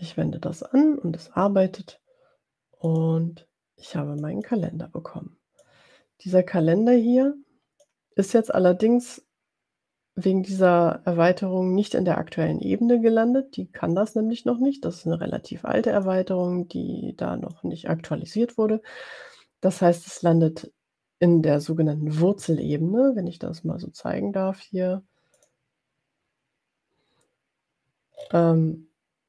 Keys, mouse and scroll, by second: 2.9 click, 4.5 click, 5.7-8.0 drag, 16.0-17.7 drag, 25.4 click, 28.2-28.5 scroll up 2.